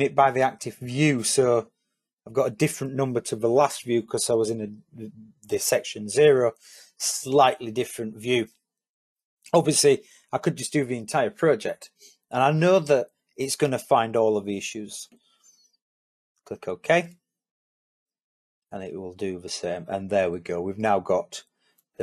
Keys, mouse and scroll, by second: 17.8 click.